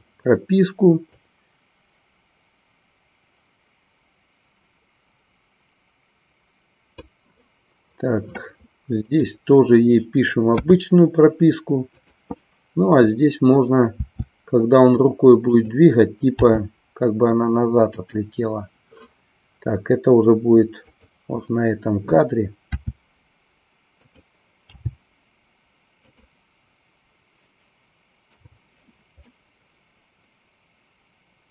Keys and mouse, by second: 1.2-7.0 drag, 9.1 click, 12.0-13.2 drag, 15.6 click, 18.0 click, 21.0 click, 26.1 click, 29.3-31.5 middle drag.